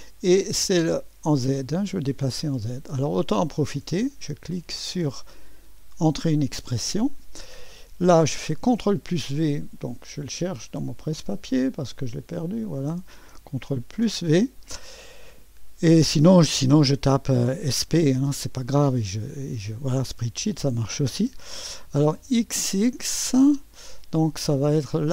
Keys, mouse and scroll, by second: 6.2 click, 8.6 ctrl+v, 11.0-13.4 drag, 12.5 ctrl+v, 13.8 ctrl+v, 16.3-17.6 drag, 17.6-18.1 typing, 19.6-22.7 drag, 22.8-23.2 typing.